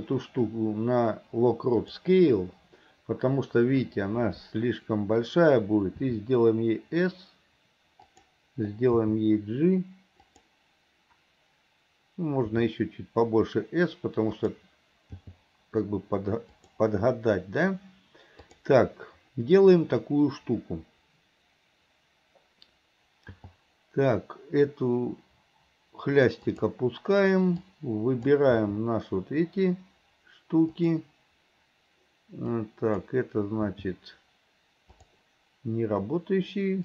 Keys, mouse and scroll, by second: 6.0 s, 9.0 g, 12.5 s, 15.3 g, 18.5 click, 23.4 g, 27.7-28.4 drag, 28.6 g, 32.6-33.2 drag, 33.7 g.